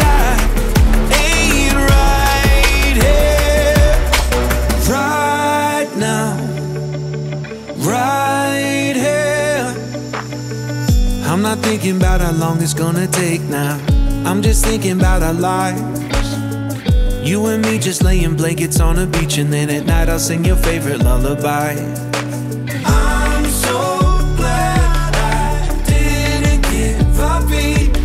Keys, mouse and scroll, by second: 0.6-1.6 scroll up 8, 1.6-2.1 middle drag, 2.1 shift+a, 4.7 Down, 7.7 middle click, 8.2 scroll down 2, 8.4-8.8 middle drag, 8.8 shift+a, 12.9 scroll down 5, 13.1 middle click, 13.3-13.7 scroll up 1, 13.7-16.0 drag, 16.0-16.5 middle drag, 16.5-16.9 scroll up 4, 16.9 shift+a, 20.3 middle click, 20.7-21.2 scroll up 7, 21.2-21.8 middle drag, 21.8-23.5 drag, 24.0-27.1 drag, 27.6-28.0 middle drag.